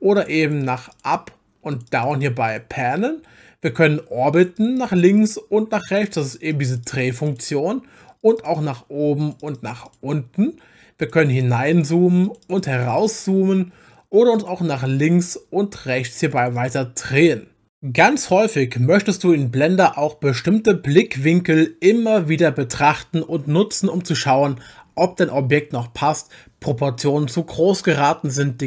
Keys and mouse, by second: 0.2 click, 0.4 click, 0.6 click, 0.8 click, 0.9 click, 1.1 click, 1.7 click, 1.9 click, 2.0 click, 2.2 click, 2.5 click, 4.4 click, 4.6 click, 4.8 click, 5.0 click, 5.1 click, 5.7 click, 5.9 click, 6.0 click, 6.2 click, 6.4 click, 6.5 click, 6.7 click, 6.8 click, 7.0 click, 7.3 click, 8.2 click, 8.4 click, 8.6 click, 9.2 click, 9.4 click, 9.6 click, 9.7 click, 9.9 click, 11.0 click, 11.2 click, 11.3 click, 11.7 click, 12.2 click, 12.4 click, 12.6 click, 12.8 click, 12.9 click, 13.1 click, 14.3 click, 14.8 click, 15.0 click, 15.2 click, 16.1 click, 16.2 click, 16.4 click, 16.6 click, 17.0 click.